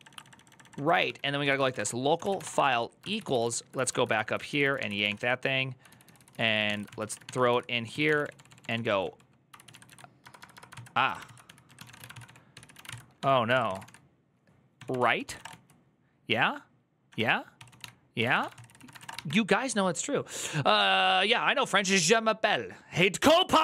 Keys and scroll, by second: 0.0-19.2 typing, 2.9 ctrl+u, 3.1 ctrl+u, 3.5 ctrl+u, 10.5 ctrl+c, 14.8 ctrl+c.